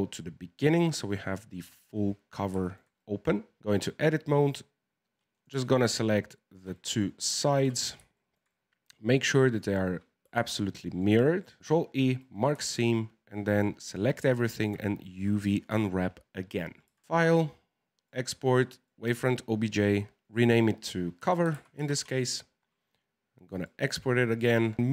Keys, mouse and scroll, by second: 0.7 right click, 1.1-4.6 middle drag, 4.6 scroll up 1, 5.3 right click, 5.6 alt+shift+right click, 5.8 alt+shift+right click, 6.7-11.0 middle drag, 11.0 alt+shift+right click, 11.6 ctrl+e, 12.5 a, 12.7 a, 14.2 u, 16.9 Tab, 17.0-19.8 drag.